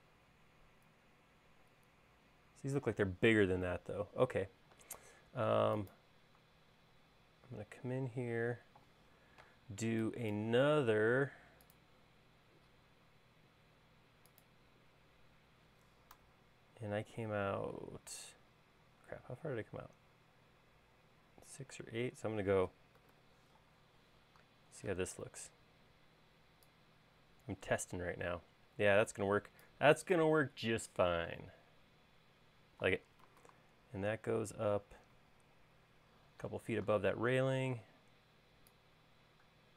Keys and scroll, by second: 23.1-23.9 typing, 25.2 p, 30.7 space, 33.8 super+Tab, 36.1 super+Tab, 38.0 p.